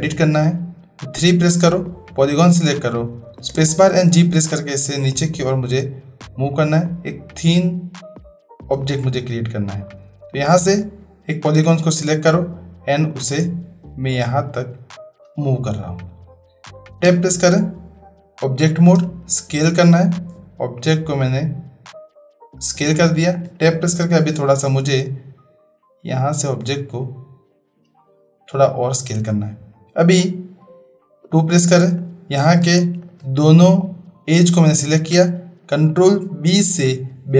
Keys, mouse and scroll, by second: 1.2 3, 3.3 space, 4.5-8.7 drag, 9.0-9.9 middle drag, 10.8 click, 11.7-15.3 drag, 17.0 Tab, 19.0 s, 23.4 Tab, 25.0 click, 31.2 2, 33.0 shift+click, 35.8 ctrl+b.